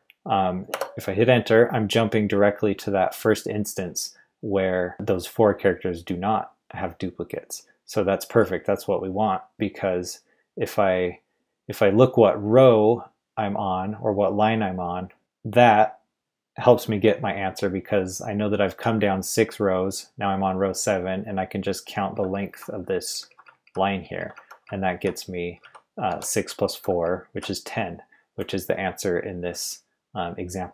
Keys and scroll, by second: 0.7 Return, 22.1-27.9 typing.